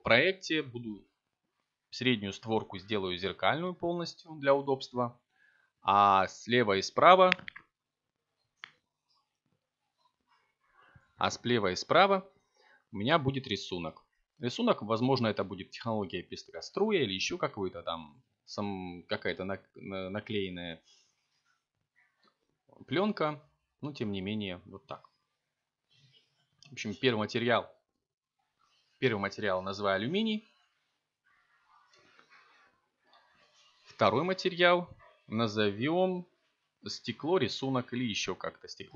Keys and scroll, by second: 7.6 f, 8.4 k, 8.7 ., 9.8 v, 10.0 b, 10.2 y, 12.0 BackSpace, 14.0-16.4 typing, 17.8 Return, 23.6-25.6 typing.